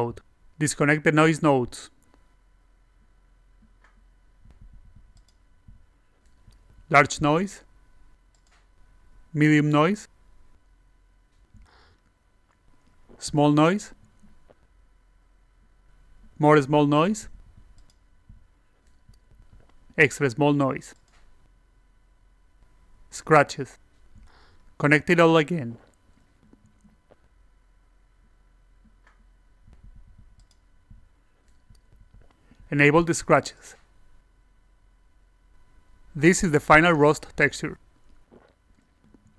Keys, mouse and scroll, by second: 0.7 click, 1.2 click, 1.4 click, 2.0 click, 2.8 click, 4.0 click, 5.1 click, 5.7 click, 6.5 click, 8.1 click, 9.4 click, 10.0 click, 10.8 click, 11.8-12.8 drag, 13.6 click, 14.7-16.2 drag, 16.9 click, 18.5-19.7 drag, 20.7 click, 20.9 alt+click, 22.6 click, 22.9 e, 24.6 e, 25.6 click, 27.1 click, 28.5 click, 30.2-31.2 drag, 33.1 click, 33.2 e, 33.6 alt+click, 34.0 click, 34.4 click, 34.9 click, 35.5 click, 36.0-38.8 alt+drag.